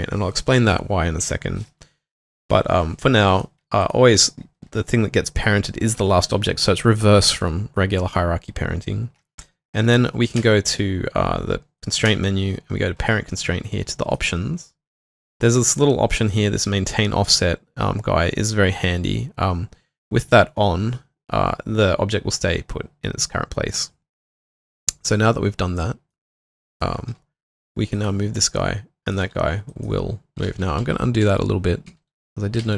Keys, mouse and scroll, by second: 3.8 shift+click, 10.4 space, 27.1 typing, 29.0-32.7 typing.